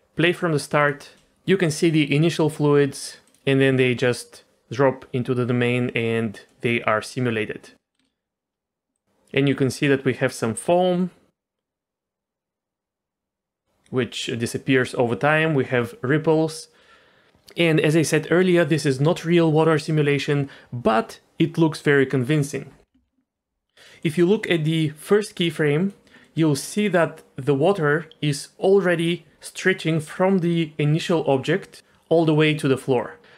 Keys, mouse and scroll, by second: 0.8 click, 3.2 click, 6.5 middle click, 7.0 scroll up 2, 8.0 space, 8.9-17.3 drag, 24.0 click, 25.5 click, 26.2 middle click, 31.1 d, 31.3 click, 31.8-32.2 d, 32.3 click, 32.8 d, 32.8 d, 32.9 click.